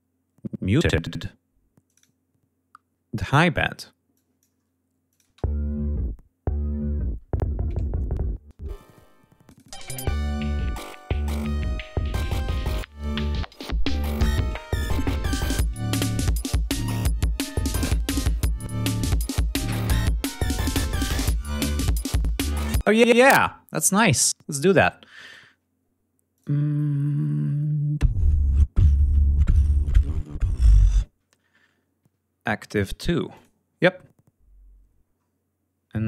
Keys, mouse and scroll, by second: 1.1 click, 2.8 click, 3.7 click, 4.7 click, 4.9 space, 8.0 space, 8.2 click, 8.8 click, 8.9 space, 17.3 ctrl+scroll down 2, 17.7 ctrl+scroll up 2, 20.2 click, 21.1 ctrl+scroll down 2, 21.4 ctrl+scroll up 2, 22.0 ctrl+space, 24.8 click, 32.9 click, 34.6 scroll down 2.